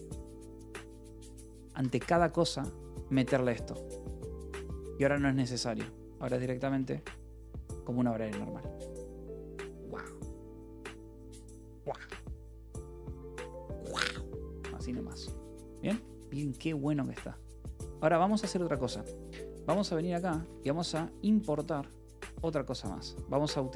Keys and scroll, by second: 0.0-0.1 typing, 0.8 Escape, 1.3-2.2 typing, 4.6 Escape, 4.8-7.8 typing, 14.7 Escape, 15.0 j, 15.8 j, 16.1 o, 16.7 Return, 17.5-20.1 typing, 18.5 Escape, 19.6 Return, 21.2-22.2 typing.